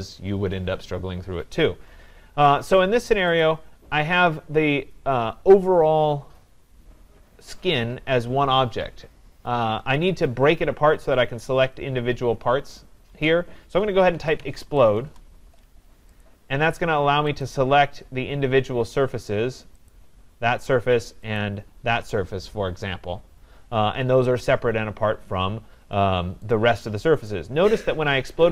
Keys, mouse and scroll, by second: 3.6-8.5 drag, 13.9-16.0 typing, 16.2 click, 17.4 click, 19.9 click, 21.4 shift+click, 25.8 middle click, 26.4 middle click, 27.0 scroll, 27.3 right click, 27.7 scroll.